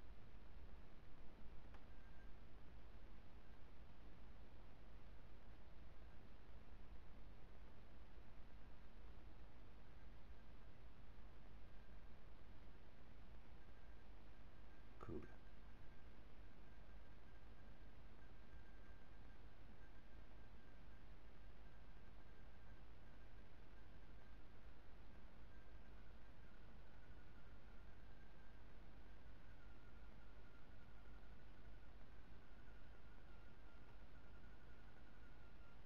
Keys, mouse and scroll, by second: 3.3 click, 3.7-5.6 middle drag, 6.0 r, 17.9-19.9 drag, 18.6-19.9 middle drag, 20.1-22.6 middle drag, 23.6 middle click, 24.1 Tab, 24.7-27.0 middle drag, 27.6-29.9 middle drag, 31.9-35.8 middle drag.